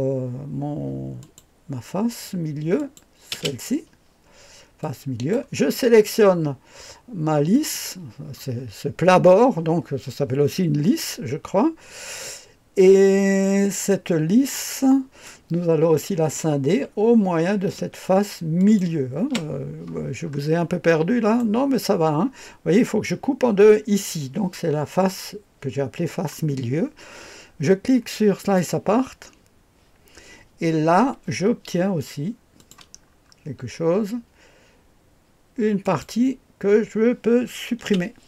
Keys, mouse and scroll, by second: 1.2 click, 2.7 click, 3.3 space, 4.8 click, 7.5 click, 8.6-11.2 scroll down 1, 14.5-15.2 drag, 18.5 ctrl+click, 20.2-20.8 scroll up 1, 28.4 click, 32.5 click, 32.9-35.8 scroll down 2, 35.8 click, 37.8 Delete.